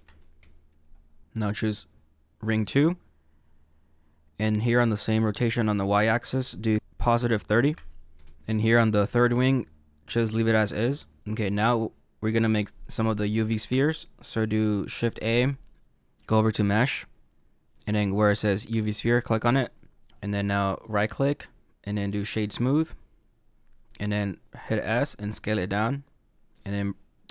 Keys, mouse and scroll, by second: 1.2 middle click, 1.4 click, 6.1-8.4 drag, 8.4 middle click, 9.3-14.1 middle drag, 15.1 shift+a, 20.7-23.7 right drag, 24.8 s.